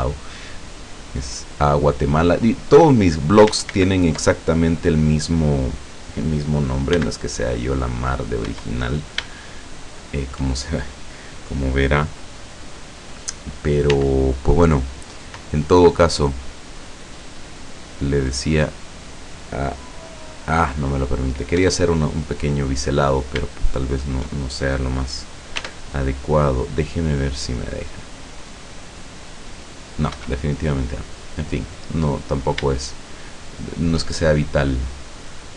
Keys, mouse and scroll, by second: 0.8-3.4 drag, 3.7 ctrl+z, 7.0 b, 8.5 Escape, 9.4 shift+click, 9.7 shift+middle click, 13.9 w, 16.8 click, 21.6 Escape, 22.8-23.4 scroll up 2, 23.8 shift+right click, 25.6 w, 27.7 click, 30.2 Escape, 31.9-33.4 middle drag, 33.4 shift+click.